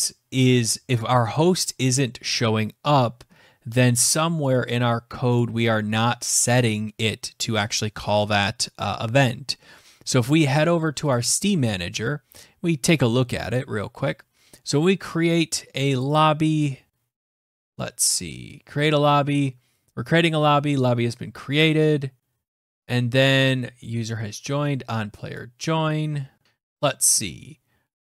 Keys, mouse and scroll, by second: 4.3 click, 5.2 click, 10.9 click, 13.4-15.8 scroll down 2, 15.8 click, 15.9 click, 17.3 click, 17.3-18.0 scroll, 18.0 click, 18.8-19.4 scroll, 19.4-19.7 scroll, 22.0-22.4 scroll, 25.0 click, 26.3 scroll, 26.4 alt+Tab, 27.9 click.